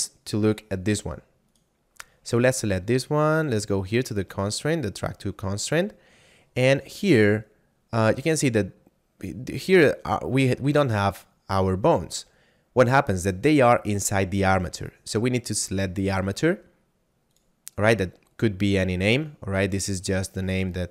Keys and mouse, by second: 3.3 click, 6.8 click, 17.2 click.